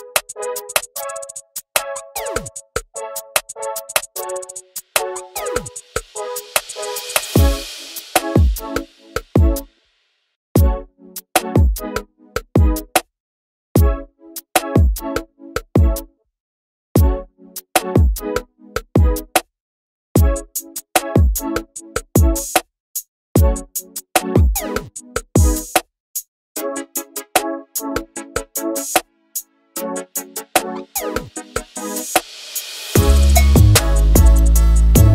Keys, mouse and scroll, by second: 0.0 ctrl+z, 0.9 click, 3.3-4.2 drag, 5.2-6.2 drag, 7.4 click, 9.1-12.3 drag, 16.8-18.3 drag, 19.7 click, 21.3 ctrl+z, 21.8 click, 24.4 ctrl+z, 24.7 scroll down 8, 25.0 alt+a, 25.0-25.4 scroll up 4, 25.4 z, 32.7-34.5 drag, 34.6 ctrl+z.